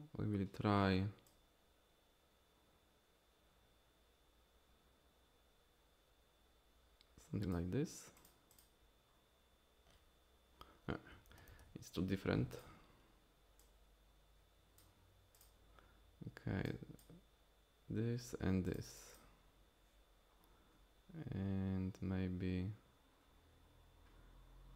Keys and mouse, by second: 8.2 click, 8.5 click, 11.3 ctrl+z, 11.5 ctrl+z, 12.5 click, 16.7 click, 18.7 click, 18.9 click, 19.1 click.